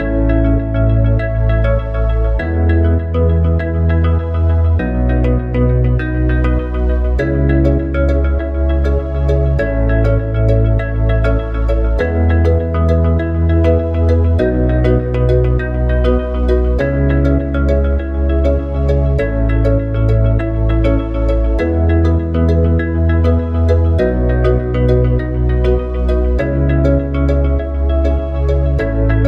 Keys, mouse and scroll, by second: 4.4 click, 5.5 e, 12.9 click, 15.1 click, 16.2 click, 17.0 click, 17.7 click, 19.3 click, 20.8 click, 23.1 click, 23.9 click, 28.5 click, 29.1 click.